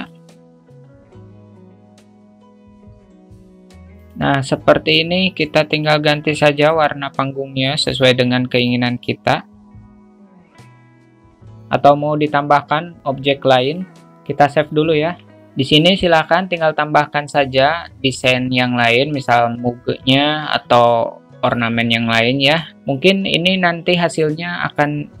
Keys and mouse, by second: 0.0 click, 0.5 click, 1.8 click, 2.1 click, 3.1 click, 3.2 q, 3.4 alt+middle click, 3.7 middle click, 3.7 q, 3.9 click, 6.5 click, 11.0 Tab, 13.6 drag, 15.0 ctrl+s.